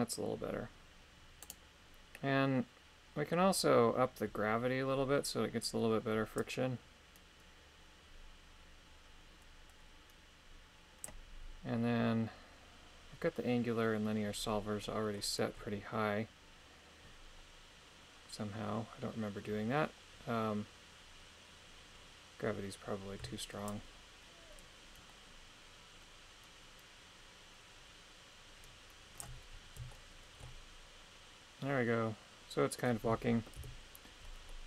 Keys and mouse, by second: 2.2-6.4 middle drag, 6.4-11.1 drag, 14.9-23.2 middle drag, 23.7-29.2 shift+drag, 29.9 shift+middle click, 33.6 KP_3, 34.5-34.6 middle drag.